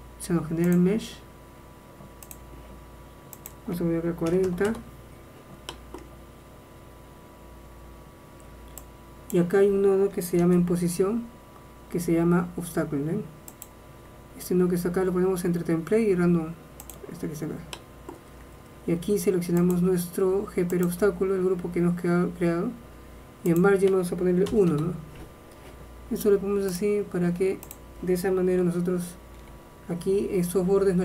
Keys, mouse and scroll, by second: 28.9 shift+space.